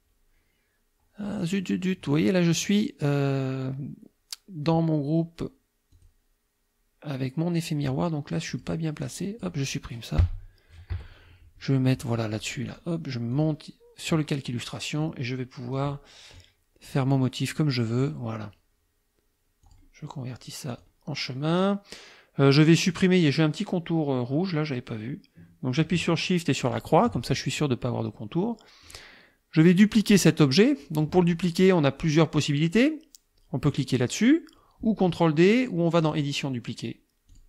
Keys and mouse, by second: 6.0 click, 8.5 click, 9.0 click, 10.9 Delete, 12.7 click, 13.3 click, 14.5 click, 15.8 click, 16.4-18.2 drag, 19.7 click, 20.7 click, 26.7 shift+click, 28.9 click, 36.1 click, 37.3 click.